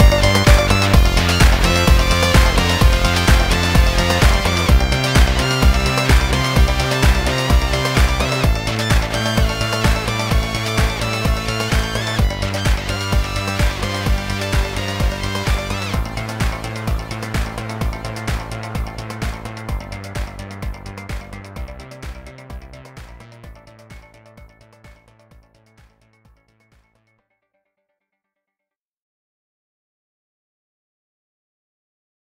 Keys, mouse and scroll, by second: 3.2 click, 4.4 scroll down 1, 4.6 shift+middle click.